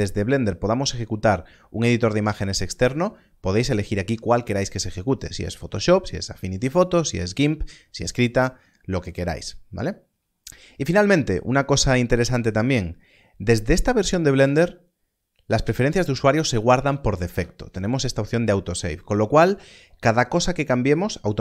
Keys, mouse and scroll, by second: 10.0-12.2 scroll down 1, 14.4 click.